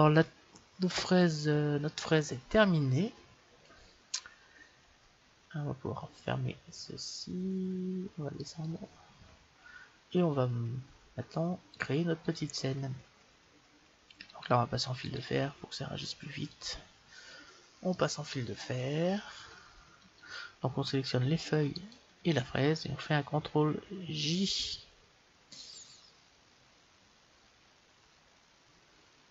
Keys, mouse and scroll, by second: 1.6-3.6 scroll down 1, 8.4-10.5 drag, 12.3-14.0 drag, 15.1-16.7 drag, 17.7-19.5 middle drag, 21.6-23.6 right drag, 24.2 ctrl+j, 25.5-27.4 middle drag.